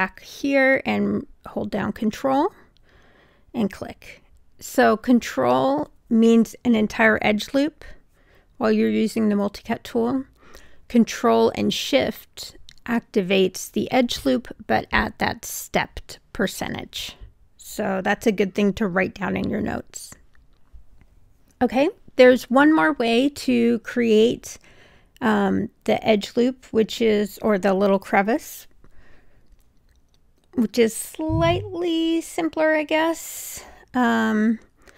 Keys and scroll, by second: 7.1 Escape, 22.7 1.